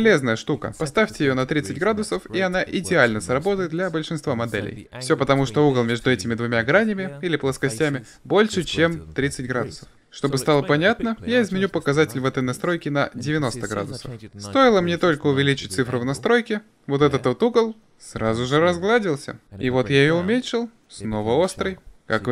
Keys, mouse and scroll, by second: 1.9 middle click, 2.9 middle click, 4.4-6.8 middle drag, 7.3 Tab, 11.2-12.9 drag, 14.9-19.1 middle drag, 19.1-20.6 drag, 20.6-22.3 middle drag.